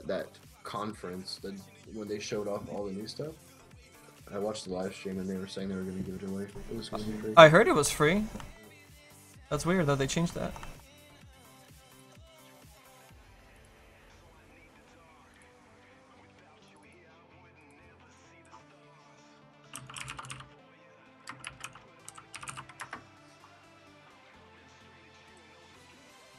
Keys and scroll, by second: 16.3 s.